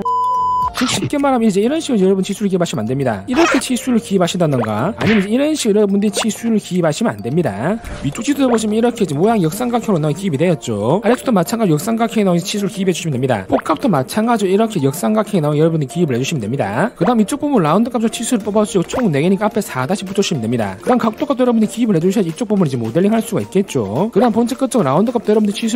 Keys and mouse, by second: 0.9 e, 1.0 right click, 1.1 click, 1.7 click, 2.0 right click, 3.4 right click, 4.4 right click, 5.5 click, 6.1 click, 6.4 click, 7.0 click, 8.0 z, 9.0-10.5 drag, 11.0 ctrl+z, 12.0-13.4 drag, 15.0-16.7 drag, 17.7 click, 21.9 click.